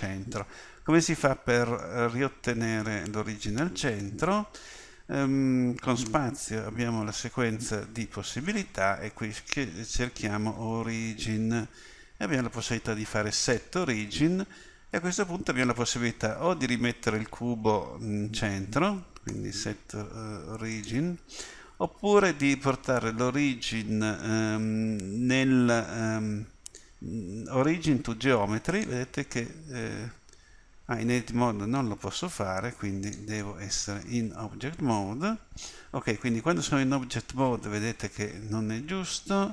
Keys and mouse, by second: 6.1 space, 19.3 space, 33.9 Tab.